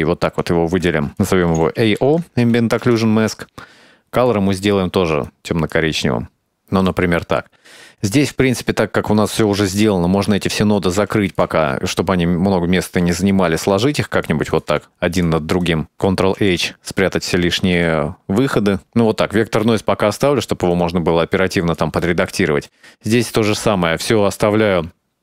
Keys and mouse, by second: 0.6 ctrl+j, 1.0 drag, 1.7-3.5 drag, 3.9 click, 4.1 click, 5.2 click, 6.8 click, 7.7 middle click, 8.2 middle click, 9.0 click, 9.8 h, 10.2 click, 10.3 h, 10.6 click, 10.7 h, 11.1 click, 12.2 click, 13.1 click, 13.2 h, 13.3 click, 14.3 click, 15.3 click, 16.5 ctrl+h, 17.1 h, 17.3-21.0 drag, 21.3 click, 22.2 middle click, 22.8-24.5 drag.